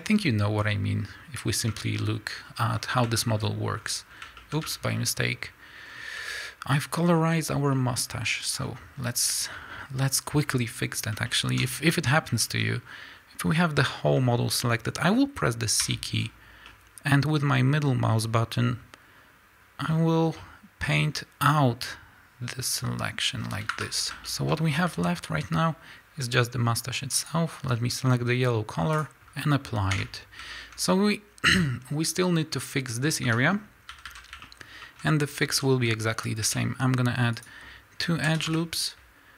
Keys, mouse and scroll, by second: 0.6 scroll down 1, 1.8 Tab, 2.5 scroll down 1, 2.7 scroll up 1, 3.2 shift+middle click, 3.8 scroll up 1, 4.1 scroll down 1, 4.4 shift+middle click, 4.8 Tab, 5.9 scroll down 1, 7.3 z, 7.7 middle click, 7.7 scroll down 1, 8.1-27.2 middle drag, 8.1 scroll up 2, 9.3 scroll down 1, 12.7 scroll up 1, 16.7 c, 24.0-24.3 scroll up 2, 24.7-25.4 scroll up 2, 25.4 z, 27.2 click, 29.1 click, 30.1 Tab, 30.5-33.6 shift+middle drag, 33.4 scroll up 2, 33.9 a, 34.1 middle click, 34.9 middle click, 35.0-35.4 scroll up 3, 35.2 middle click, 35.4 a, 36.4 ctrl+r.